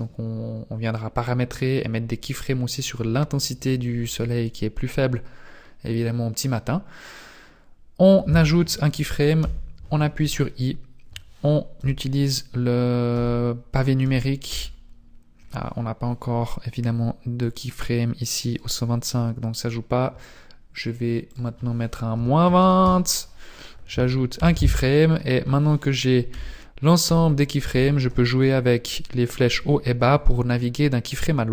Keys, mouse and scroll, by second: 9.4 i, 11.7 Down, 13.1 Right, 14.0 Up, 14.5 Down, 17.5 click, 21.3 click, 24.3 i, 26.3 Down, 27.0 Up, 27.6 Down, 29.7 Up, 30.1 Down.